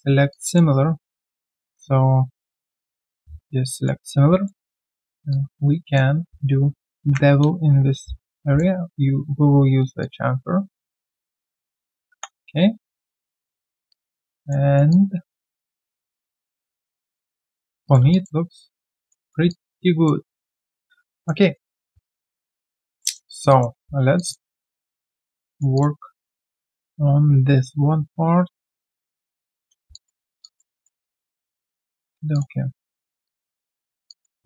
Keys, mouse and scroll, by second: 0.4 double click, 1.7 right click, 4.4 alt+middle click, 4.9-5.3 alt+scroll down 1, 5.3 alt+click, 7.0 ctrl+b, 12.1 3, 12.7 right click, 13.1 q, 13.2-13.8 scroll down 1, 13.9 alt+click, 14.4 alt+middle click, 14.6 alt+right click, 14.9 alt+click, 15.4 alt+middle click, 15.7 alt+right click, 16.0 alt+click, 16.3 alt+right click, 16.5 alt+click, 17.1 alt+right click, 17.4 scroll down 1, 18.1 alt+click, 18.4 alt+scroll down 1, 18.7 alt+click, 19.5 alt+click, 20.7 ctrl+1, 21.1 alt+click, 21.4 alt+right click, 21.6 alt+click, 23.0 alt+middle click, 23.2-23.5 alt+scroll down 1, 23.5 alt+click, 24.8 alt+middle click, 25.1 alt+click, 26.5 right click, 29.9 alt+click, 30.4 alt+click, 32.7 right click, 33.6 shift+click, 33.8 shift+double click, 34.1 alt+click, 34.4 alt+q, 34.4 click.